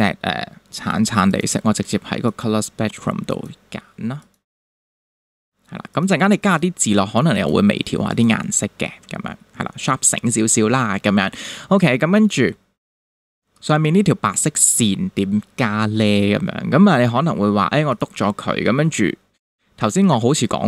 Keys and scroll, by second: 12.3 space.